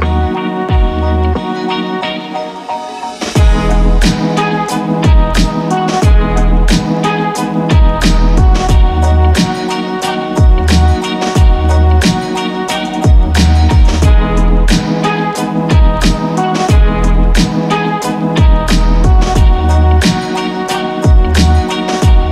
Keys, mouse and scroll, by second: 1.6 click, 3.9 click, 6.8-9.9 drag, 12.3 2, 17.2 click, 19.3 typing, 20.8 click.